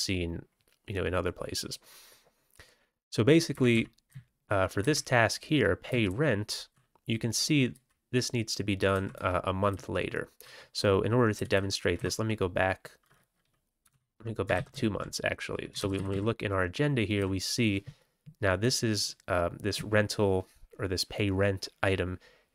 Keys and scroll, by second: 3.5 Up, 3.7 Up, 4.0 Left, 4.5 Left, 4.6 Left, 4.8 Up, 5.8 Down, 6.0 Right, 6.5-6.9 Right, 7.7 Left, 8.9 Right, 9.1 Right, 9.7 Left, 9.7-10.2 typing, 10.2 Left, 11.3 Left, 11.5 Left, 11.7 typing, 11.9 Right, 13.8 BackSpace, 13.8 BackSpace, 14.5 ctrl+x, 14.7 ctrl+s, 15.7 ctrl+c, 15.9 typing, 17.1 Down.